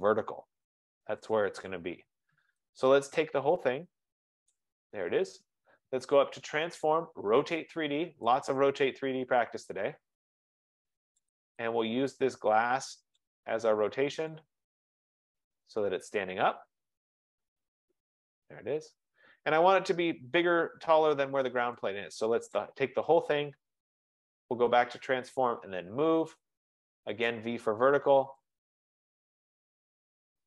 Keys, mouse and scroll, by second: 1.2 scroll down 2, 1.4-2.2 scroll, 3.6 scroll down 3, 4.6 click, 6.7 scroll, 7.1 click, 8.7 click, 11.4 click, 13.3 click, 14.5 click, 16.0 click, 16.8-17.3 scroll, 17.6 click, 20.0 right click, 22.6 click, 24.5 click, 25.8 click, 26.4 F15, 27.4 click, 28.5 click.